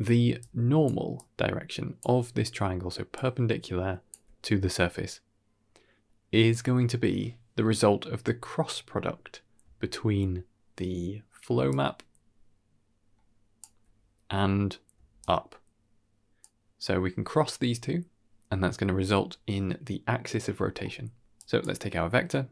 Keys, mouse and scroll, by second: 0.0-4.0 typing, 0.3 click, 1.1-1.9 drag, 3.0-4.0 drag, 5.9 d, 9.7-11.6 d, 11.6-13.5 drag, 13.5 d, 13.9 d, 15.0 d, 15.1-16.3 drag, 16.3 d, 17.2 d, 19.7-20.3 scroll down 3, 20.0 middle click, 20.5 middle click, 21.2 click.